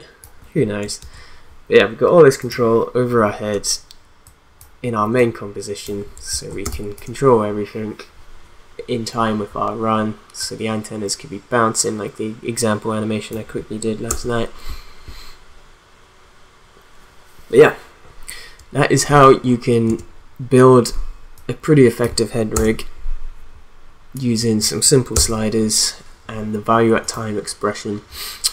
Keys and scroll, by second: 1.0 ctrl+z, 6.6 space, 14.1 space, 19.8 space, 22.5 space, 25.2 space.